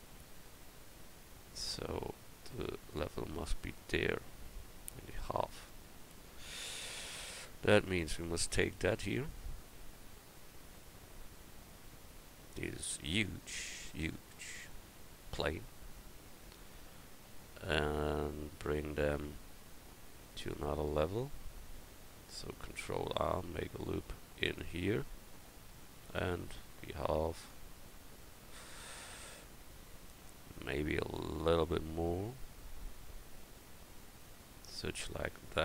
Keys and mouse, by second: 6.8 Tab, 7.4 Tab, 7.9 Tab, 13.1-17.2 right drag, 15.9-20.6 drag, 23.0 ctrl+r, 27.9 click, 31.5-34.7 drag, 34.9 middle click.